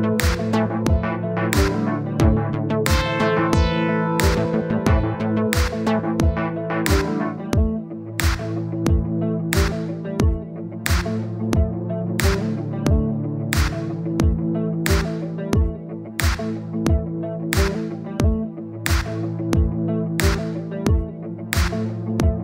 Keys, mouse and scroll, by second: 1.1-1.8 scroll up 12, 2.2 click, 2.8 middle click, 3.6-5.3 drag, 5.3-5.6 scroll up 1, 5.6-7.0 drag, 7.0 middle click, 7.5-8.6 drag, 9.0-17.6 drag, 19.4 middle click, 20.0 scroll down 2, 20.2-21.6 middle drag, 21.6-22.1 scroll up 1, 22.1-22.4 middle drag.